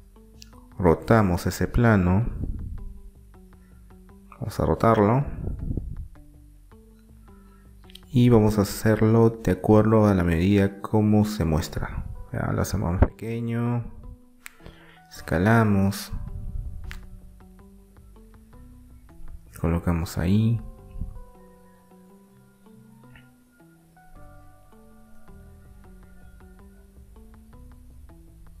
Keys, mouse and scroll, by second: 1.6 r, 4.6 r, 8.2-10.2 middle drag, 11.2 s, 14.6-16.6 middle drag, 16.6-19.9 drag, 20.6-23.9 middle drag, 22.6 s, 25.2-28.6 drag.